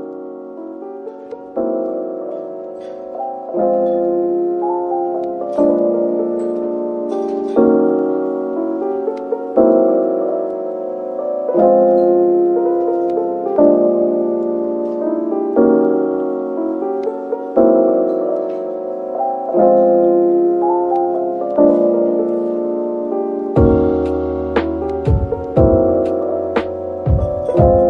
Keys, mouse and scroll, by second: 0.5 double click, 1.3 typing, 2.1 shift+click, 2.8-3.2 typing, 11.6 Tab, 12.0 middle click, 13.1 typing, 14.6-15.8 scroll up 1, 16.4-18.1 typing, 19.1 typing, 21.5-23.1 typing, 25.4 scroll up 1, 26.2-27.1 typing.